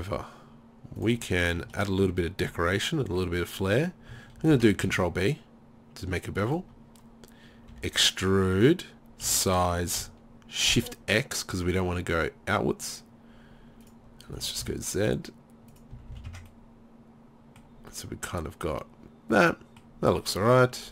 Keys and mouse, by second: 2.2 middle click, 4.4 ctrl+b, 6.6 click, 7.7 e, 8.6 click, 9.3 s, 13.9 click, 14.3 s, 15.6 click, 16.0 z, 16.2 z, 16.3 Tab, 20.1 Tab.